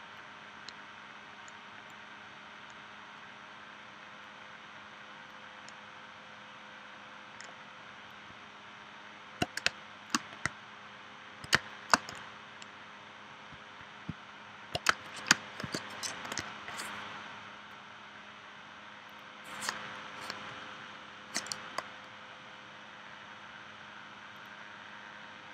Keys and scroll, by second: 9.7 space, 11.6 space, 14.9 space, 15.6 p.